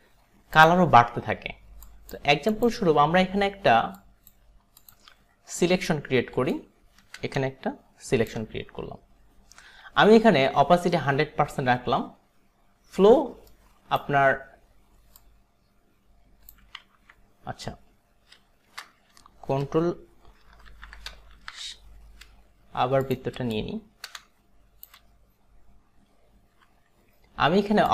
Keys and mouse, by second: 0.6 click, 1.9 click, 2.6 click, 4.0 click, 4.9 click, 6.5 shift+click, 9.8 b, 13.6 alt+right click, 15.3 click, 17.0 ctrl+z, 20.8 ctrl+alt+d, 21.4 ctrl+shift+d, 23.0 click, 23.6 shift+click, 26.6 b.